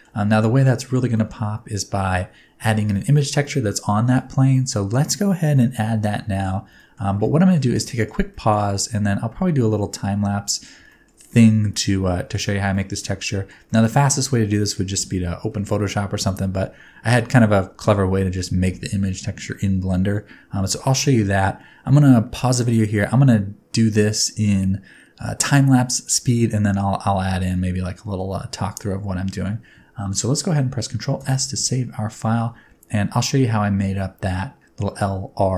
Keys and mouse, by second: 1.1 shift+middle click, 5.5 middle click, 6.8 shift+middle click, 7.3 ctrl+middle click, 7.8 shift+middle click, 8.2 shift+middle click, 8.9-10.6 middle drag, 10.8 shift+middle click, 11.3-12.3 middle drag, 12.6 ctrl+middle click, 13.2 shift+middle click, 13.6 middle click, 14.2 click, 14.2 right click, 14.6 shift+middle click, 14.8-30.6 drag, 14.8-30.6 middle drag, 14.8-30.6 right drag, 31.1 ctrl+s, 31.3-34.1 drag, 31.3-34.1 middle drag, 31.3-34.1 right drag.